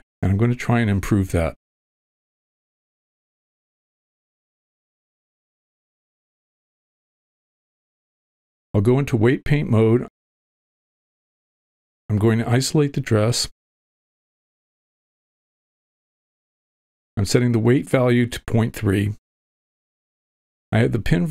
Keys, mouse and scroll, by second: 0.1 space, 2.0-5.6 drag, 5.8-9.2 drag, 10.6 shift+middle click, 12.5 v, 13.5 w, 13.8 click, 14.6 ctrl+l, 15.3 shift+h, 16.5 click, 17.0-18.0 drag, 18.3 v, 19.9 ctrl+middle click, 20.3 shift+middle click, 20.7 middle click.